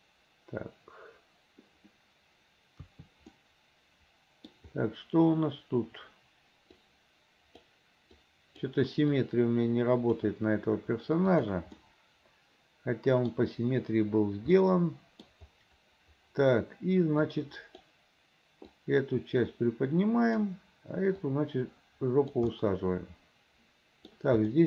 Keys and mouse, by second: 2.9 KP_3, 3.4-4.7 drag, 6.9 click, 8.4 click, 9.2-10.3 drag, 11.5 click, 11.9-13.4 middle drag, 14.7 middle click, 16.3 middle click, 17.4 click, 18.8-20.5 drag, 21.3-22.4 drag, 22.7-24.2 middle drag.